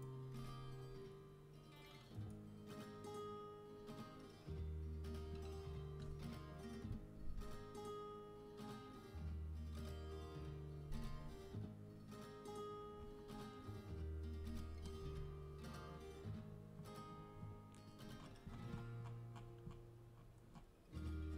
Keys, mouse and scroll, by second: 2.1-3.8 drag, 13.9-14.9 middle drag, 14.9 Tab.